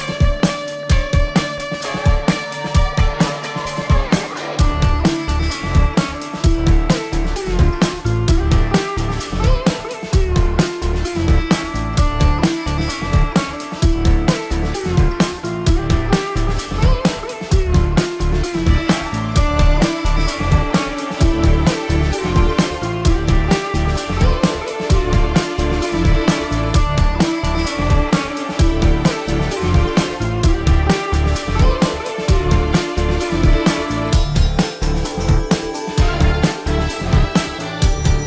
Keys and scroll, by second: 0.2 space, 2.0 space, 4.2 space, 5.6 space, 5.9 ctrl+alt+z, 6.6 space, 7.3 space, 7.9 space, 10.9 ctrl+=, 11.4 ctrl+=, 13.4 space, 13.8 space, 15.9 ctrl+alt+z, 20.5 ctrl+=, 21.4 ctrl+=, 22.2 ctrl+=, 22.3 space, 22.6 ctrl+=, 22.8 space, 23.9 ctrl+=, 24.2 ctrl+alt+z, 24.3 space, 28.0 ctrl+=, 28.7 space, 32.7 ctrl+alt+z, 34.3 ctrl+=, 34.7 ctrl+=, 35.2 ctrl+=, 36.0 space, 37.1 space, 37.7 space, 38.0 space.